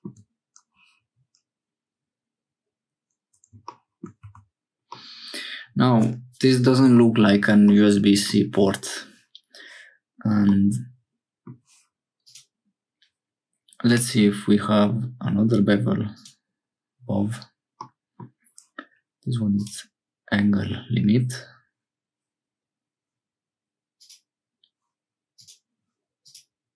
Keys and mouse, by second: 4.2 Tab, 4.9-6.1 middle drag, 7.7 middle click, 10.5-11.5 middle drag, 12.3-14.4 drag, 17.8 middle click, 25.5-26.7 drag.